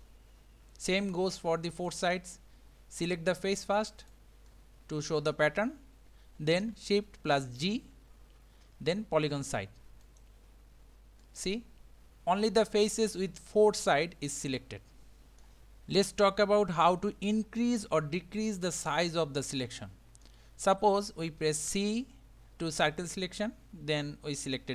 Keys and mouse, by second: 1.8 click, 4.0 click, 4.6-4.9 middle drag, 4.9 click, 7.7 shift+g, 11.2-15.4 middle drag, 16.1-20.3 middle drag, 21.7 c.